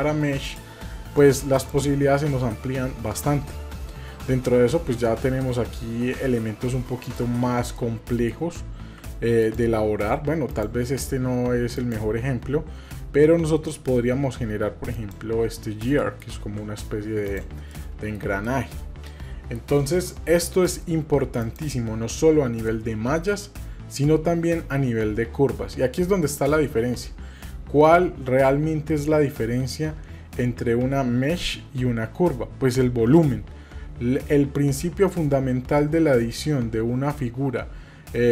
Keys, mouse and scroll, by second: 1.5-7.2 drag, 7.8 middle click, 8.8 g, 10.5-15.1 drag, 16.0 middle click, 16.4 g, 18.4-19.0 shift+middle drag, 19.2 middle drag, 21.4-38.3 drag.